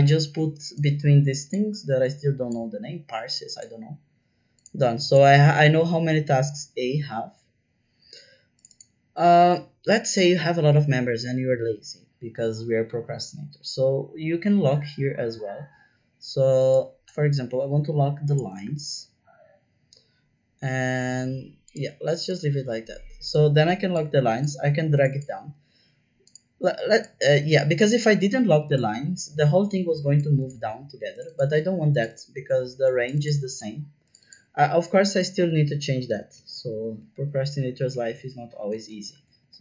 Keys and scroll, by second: 17.3 shift+4, 18.6 shift+4, 36.0 BackSpace, 36.3 shift+b, 36.6 Return, 36.9 Return, 37.9 Left, 38.1 Left, 38.6 BackSpace, 38.9 shift+c, 39.1 Return, 39.4 Return.